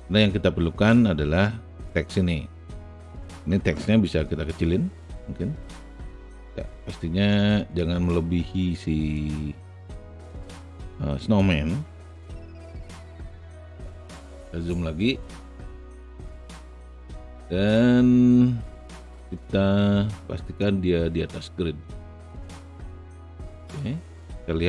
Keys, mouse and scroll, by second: 0.7-2.0 alt+drag, 4.5 r, 5.7 click, 7.3 click, 9.1-11.8 drag, 12.3 alt+right click, 13.0 alt+middle click, 13.6 alt+middle click, 13.9 alt+click, 14.7 alt+right click, 15.3 alt+middle click, 16.4-19.5 alt+middle drag, 20.6-24.6 drag.